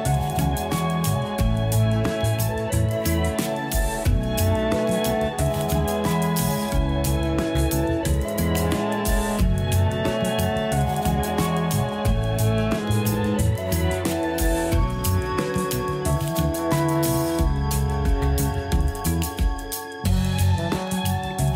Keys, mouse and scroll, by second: 0.7 click, 1.5-3.3 middle drag, 3.3-3.7 scroll up 2, 3.7-4.3 shift+middle drag, 4.5 scroll up 4, 5.0 scroll down 2, 5.6-6.1 scroll down 1, 8.3 scroll down 2, 8.4-10.0 drag, 10.0-11.0 scroll down 6, 11.0 KP_Divide, 12.1-12.4 scroll up 1, 12.4-13.3 middle drag, 13.3-14.2 scroll up 3, 14.2 2, 14.3 click, 15.0 shift+click, 16.0-17.6 typing, 16.7 click, 17.4 scroll down 1, 18.1-19.8 middle drag, 19.8 scroll up 1, 20.3 middle click, 20.8-21.2 scroll up 1, 21.2 scroll down 1.